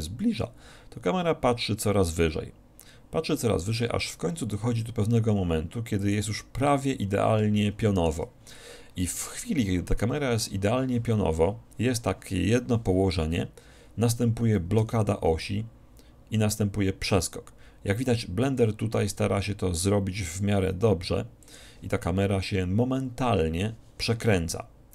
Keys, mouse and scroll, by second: 6.3-8.0 drag, 7.6-9.4 middle drag, 14.9 g, 21.7-23.4 drag.